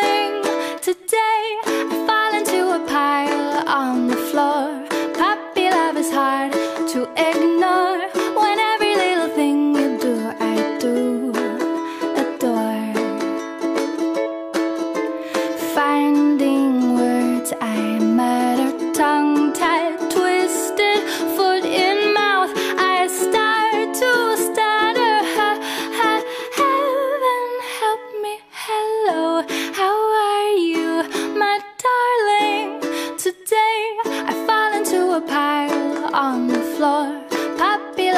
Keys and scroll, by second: 0.2 ctrl+z, 18.6 ctrl+z, 26.4 ctrl+z, 28.2 ctrl+z.